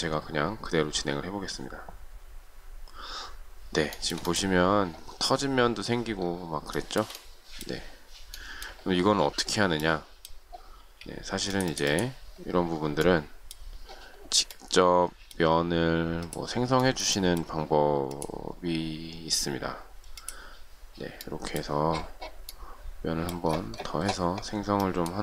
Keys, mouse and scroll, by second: 3.9 shift+middle click, 6.7 shift+middle click, 10.8 space, 16.7 shift+middle click, 24.8 shift+middle click.